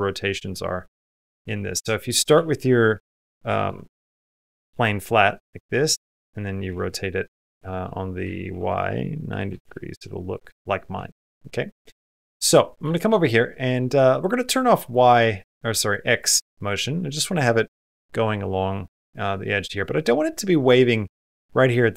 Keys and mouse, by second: 0.4 middle click, 1.0 Tab, 1.5 middle click, 2.2 r, 5.4 Tab, 6.5 r, 8.0 r, 10.1 middle click, 10.8 shift+middle click, 12.2 click, 12.7 shift+middle click, 14.6 click, 16.4 middle click, 19.2 middle click, 19.9 middle click.